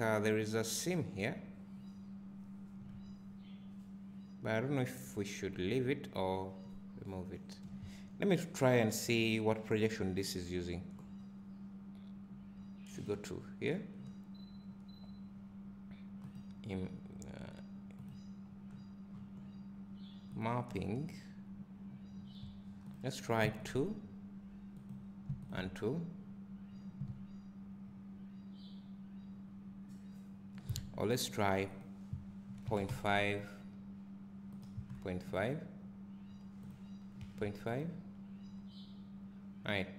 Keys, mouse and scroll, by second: 24.5 click, 26.3 click, 27.1 `, 34.1 click, 38.5 click.